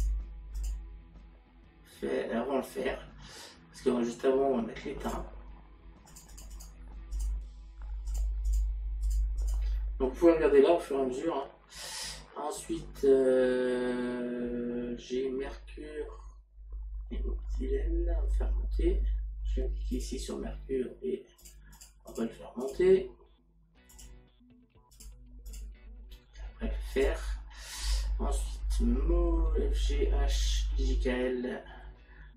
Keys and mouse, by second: 20.0 click, 21.4 click, 23.9 click, 27.0 click.